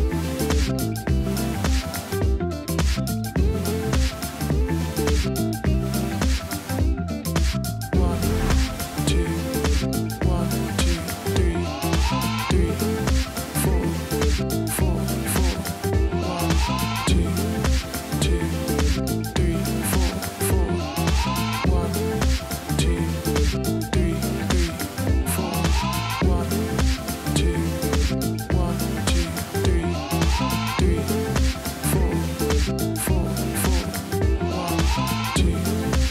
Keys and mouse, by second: 0.9 alt+Num_Lock, 1.0 z, 9.9 space, 10.2 click, 11.2 space, 11.3 click, 11.5 space, 11.6 v, 12.0 click, 12.9 click, 13.1 z, 13.2 click, 13.4 t, 14.2 click, 14.3 Return, 14.5 click, 15.0 click, 15.3 t, 15.5 alt+click, 15.7 Return, 16.0 t, 16.0 click, 16.5 Return, 16.5 v, 16.7 click, 17.8 z, 17.9 click, 18.4 click, 23.3 click, 24.6 click, 24.7 t, 27.9 F8, 28.5 F12, 29.8 click, 30.3 click, 31.2 click, 32.1 click, 32.9 shift+Num_Lock, 33.2 click, 33.4 click.